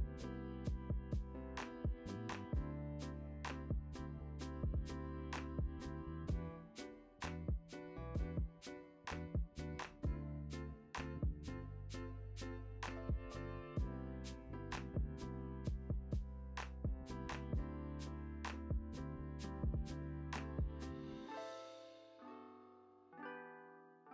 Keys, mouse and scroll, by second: 0.0-2.0 typing, 0.2 ctrl+z, 2.7 Tab, 2.8 click, 3.4 h, 3.6 `, 3.7 click, 4.3 ctrl+z, 5.7 Tab, 6.0 e, 6.2 click, 6.4 `, 7.0 click, 7.2 h, 7.4 click, 9.4-11.4 drag, 9.4 `, 10.3 `, 10.8-11.2 scroll down 2, 11.4 scroll up 1, 11.8-17.0 typing, 12.1 scroll up 1, 12.4 Tab, 12.9 alt+a, 13.1-13.6 scroll down 1, 14.2 Tab, 15.4-15.9 scroll down 2, 15.9-17.0 right drag, 17.2 scroll down 1, 17.3 scroll up 1, 17.8 scroll down 1, 18.0-18.5 scroll up 1, 18.8-21.6 drag, 20.8 alt+a, 21.0 KP_0, 21.3 scroll up 1, 22.3 a.